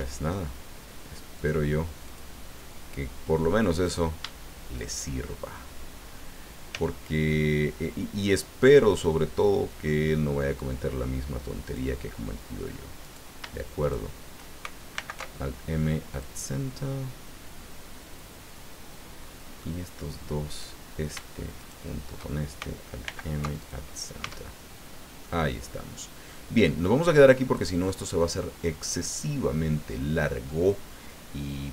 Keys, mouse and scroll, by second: 1.4 click, 2.0 click, 3.7 right click, 4.8 shift+right click, 6.7 g, 11.6 click, 13.0 right click, 13.8 shift+right click, 14.9 alt+m, 16.1 click, 16.8-19.8 drag, 20.5 right click, 21.6 shift+right click, 23.0 alt+m, 23.6 alt+click, 24.2 Tab, 24.9 scroll down 2, 25.2-26.9 drag, 26.9 scroll down 2, 27.2-30.6 drag.